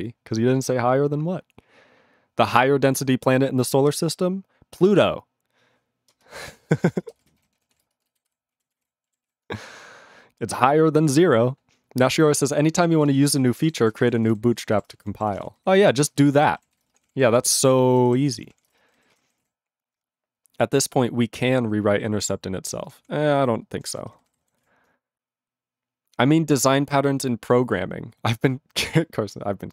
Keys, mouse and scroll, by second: 6.1 ctrl+space, 6.6 ctrl+alt+b, 6.7 ctrl+g, 6.9 ctrl+space, 7.3 ctrl+alt+f, 7.4 ctrl+g, 7.7 ctrl+s, 7.8 ctrl+space, 8.2 ctrl+alt+b, 8.5 ctrl+a, 8.6 ctrl+space, 8.7 ctrl+e, 8.7 ctrl+g, 9.2 ctrl+s, 12.9 ctrl+a, 13.1 ctrl+space, 13.1 ctrl+e, 13.2 ctrl+g, 13.6 ctrl+s, 13.8 ctrl+a, 13.9 ctrl+space, 14.0 ctrl+n, 14.1 ctrl+n, 14.2 ctrl+e, 14.2 ctrl+g, 14.7 ctrl+s, 14.9 ctrl+a, 15.0 ctrl+p, 15.1 ctrl+p, 15.2 ctrl+p, 15.3 ctrl+g, 15.3 ctrl+e, 15.5 ctrl+n, 15.9 ctrl+s, 16.0 ctrl+space, 16.1 ctrl+n, 16.2 ctrl+n, 16.3 ctrl+g, 16.7 ctrl+s, 16.8 ctrl+space, 16.9 ctrl+p, 17.0 ctrl+p, 17.1 ctrl+g, 17.4 ctrl+s, 17.5 ctrl+space, 17.6 ctrl+n, 17.7 ctrl+n, 17.9 ctrl+g, 18.2 ctrl+s, 18.3 ctrl+space, 18.3 ctrl+p, 18.5 ctrl+p, 18.6 ctrl+g, 18.7 ctrl+space, 18.8 ctrl+n, 19.0 ctrl+n, 19.1 ctrl+g, 19.4 ctrl+s, 22.7 ctrl+space, 22.8 ctrl+p, 23.0 ctrl+p, 23.2 ctrl+g, 23.9 ctrl+s, 24.0 ctrl+space, 24.1 ctrl+n, 24.2 ctrl+n, 24.2 ctrl+g, 24.6 ctrl+s.